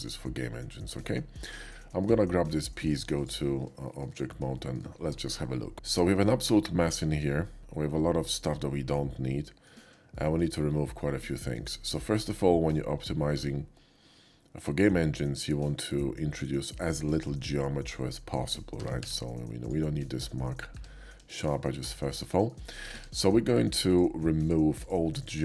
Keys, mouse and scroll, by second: 0.7 /, 1.7 shift+middle drag, 3.8 shift+middle click, 4.5 shift+middle drag, 5.7 Tab, 5.7 middle click, 6.9 shift+middle click, 7.4-9.6 shift+middle drag, 10.1 middle click, 10.7 middle click, 18.8 a, 19.6 click, 19.6 q, 20.7 Tab, 21.3 shift+Tab, 21.3 shift+middle click, 21.8 Tab, 22.3 shift+middle click, 22.9 Tab, 24.4 alt+shift+click, 24.8-25.4 alt+shift+drag.